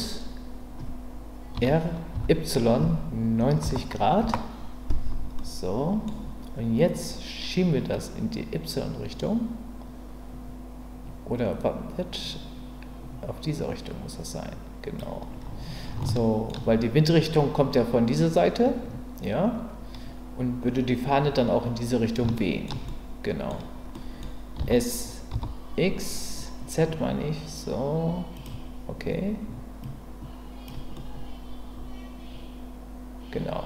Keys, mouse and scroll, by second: 1.5 r, 2.1 y, 3.4 KP_9, 5.4 middle click, 7.9-15.0 drag, 16.0 shift+middle click, 22.3 shift+middle click, 22.8-24.2 middle drag, 24.6 s, 25.3 z, 28.3 click, 29.9 click, 30.9-32.3 scroll up 1, 32.3-33.6 scroll up 1.